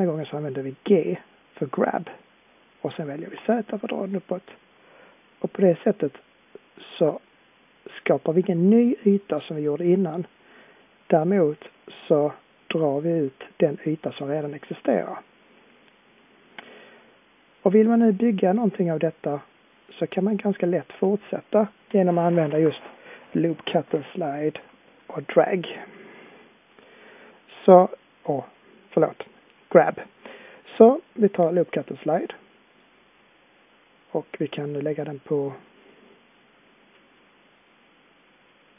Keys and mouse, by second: 1.9 g, 10.7 middle click, 10.7-11.8 drag, 11.8-17.9 middle drag, 26.5-32.6 middle drag.